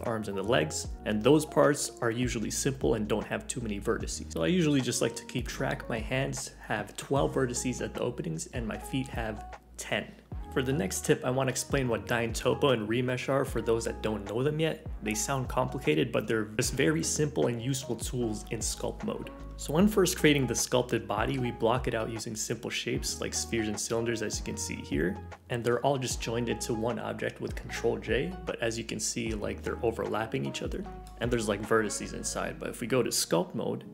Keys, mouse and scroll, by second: 0.0 scroll up 1, 0.1 middle click, 0.1 scroll down 2, 0.2 middle click, 0.3 scroll up 1, 0.4 middle click, 0.6 click, 0.6 middle click, 0.7 scroll down 1, 0.7 middle click.